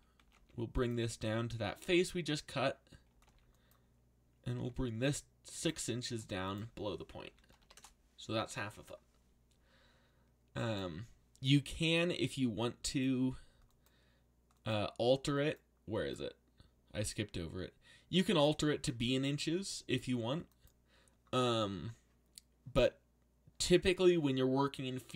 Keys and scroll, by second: 0.2 g, 2.8-5.1 typing, 7.0-8.1 typing, 21.4 Return.